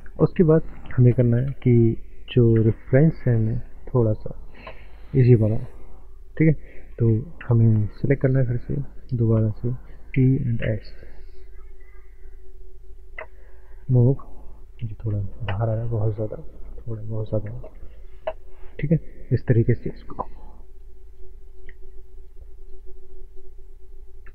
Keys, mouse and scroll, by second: 1.2 ctrl+space, 2.0 scroll up 1, 2.9 shift+middle click, 6.3 click, 7.5 click, 8.3 alt+click, 10.1-10.6 typing, 12.8 click, 13.5 shift+middle click, 13.9 click, 15.6 ctrl+z, 16.4 click, 17.7 shift+middle click, 18.5 shift+middle click, 18.9 click.